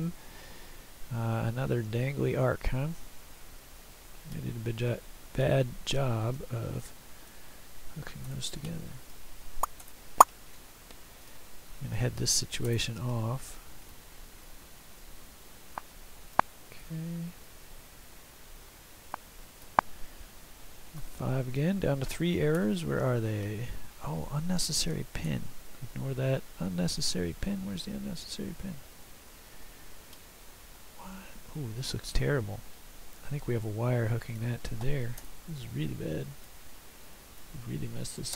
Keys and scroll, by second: 6.5 Escape, 8.3 Delete, 12.8 Delete, 20.7 F5, 22.6 <, 25.4 <, 35.3 Delete.